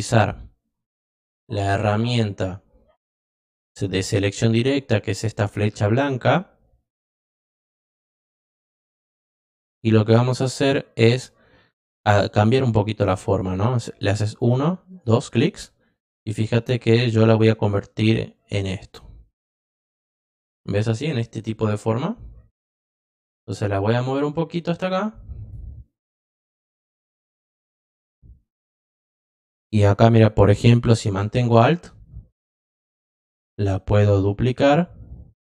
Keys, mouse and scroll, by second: 5.9 click, 12.5 click, 14.2 click, 14.9 click, 15.4-16.8 drag, 18.3-20.4 drag, 22.9-25.5 drag, 31.7-35.4 alt+drag.